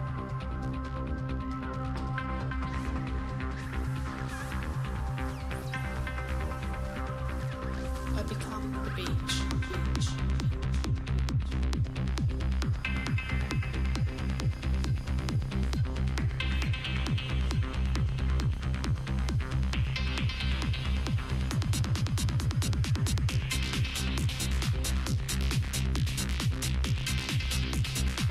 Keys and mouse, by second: 0.3 z, 0.7 z, 0.8 x, 1.6 Tab, 2.7 Tab, 3.5 Tab, 3.7 click, 4.2 Tab, 5.1 g, 5.9 g, 6.5 Tab, 6.5 click, 7.1 Tab, 7.7 g, 8.2 Tab, 9.1 KP_Divide, 10.3 z, 10.9 z, 12.7 KP_Divide, 14.5 click, 19.1 right drag, 19.3 Tab, 19.4 right click, 19.6 a, 19.7 a, 20.2 g, 20.7 click, 22.1 g, 24.2 r, 25.7 s, 27.3 Tab.